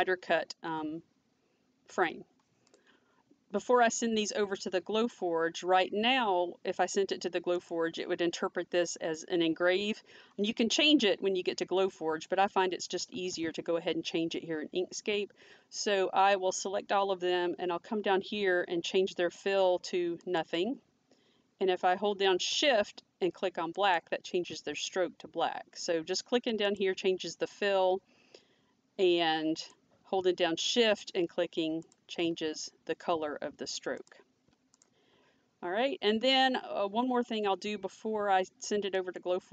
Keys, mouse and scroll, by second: 7.6 click, 13.2 ctrl+a, 20.3 click, 23.8 click, 26.7 click, 29.6 click, 31.9 click, 34.0 click, 39.0 click, 39.0 click.